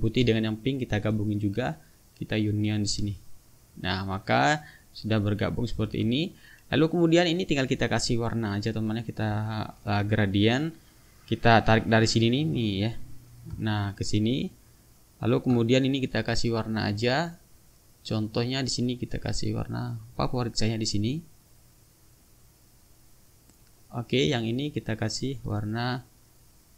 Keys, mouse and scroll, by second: 0.7 shift+click, 1.7-3.0 drag, 3.7 click, 4.4 click, 4.8-5.9 drag, 5.9 ctrl+z, 7.0 click, 9.1 click, 13.1-15.5 drag, 16.0 ctrl+click, 16.9 click, 18.5 click, 19.5 click, 20.1-22.6 drag, 25.2 click.